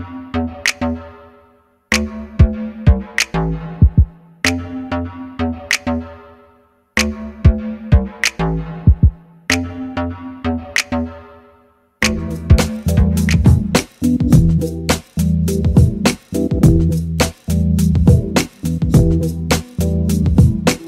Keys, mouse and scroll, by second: 0.9 middle click, 1.3 KP_0, 4.8 middle click, 6.5-9.1 middle drag, 10.7 click, 11.5 click, 11.8 click, 15.7-17.3 drag.